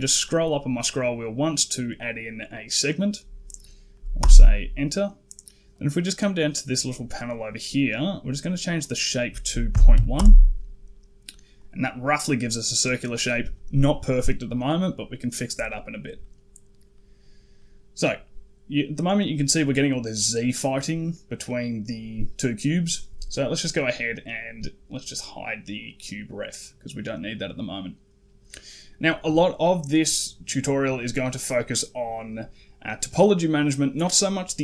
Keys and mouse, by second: 6.5 click, 8.8-10.0 drag, 11.4 click, 16.0 middle click, 16.8 middle click, 17.4 middle click, 18.8 middle click, 20.9 middle click, 25.6 click, 26.4 middle click, 27.5 middle click, 28.5 middle click.